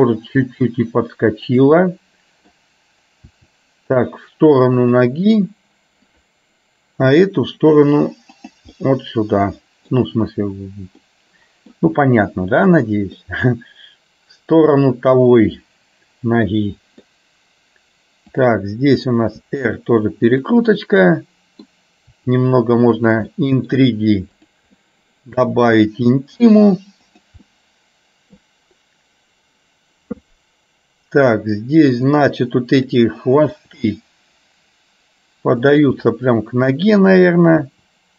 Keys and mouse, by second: 1.8 middle click, 3.4 r, 7.2 r, 8.8-10.0 middle drag, 11.2 middle click, 13.3-14.8 middle drag, 15.3-17.2 middle drag, 18.4 click, 19.4 r, 21.2 middle click, 22.3 r, 23.4 middle click, 24.5 click, 24.9 middle click, 25.8 r, 27.5 middle click, 32.2-33.3 drag, 33.7 r, 36.0-37.4 middle drag, 37.8 r.